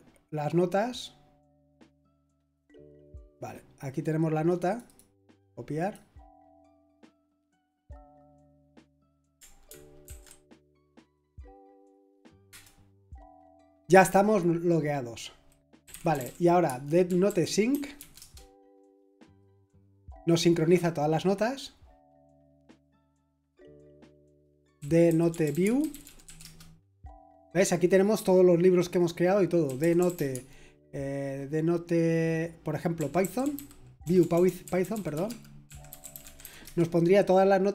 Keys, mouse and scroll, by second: 1.7 click, 3.2 click, 4.5 click, 4.7 click, 4.8 click, 5.3 right click, 5.8 click, 6.8 click, 8.4 click, 9.0 Return, 10.0 ctrl+alt+v, 12.5 Return, 15.6-18.4 typing, 24.5-26.7 typing, 29.4-30.6 typing, 32.7-36.9 typing.